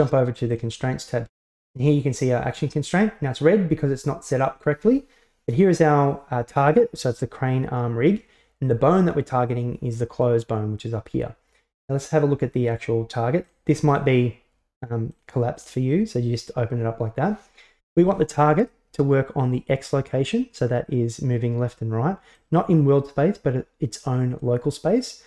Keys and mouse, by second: 1.7 ctrl+z, 14.0 click, 15.2 click, 15.7 click, 22.4-24.5 drag.